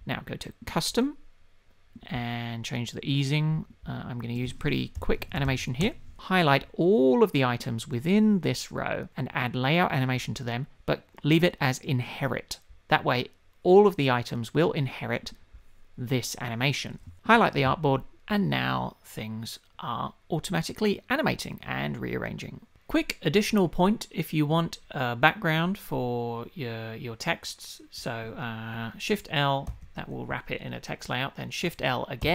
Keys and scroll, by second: 5.8 Return.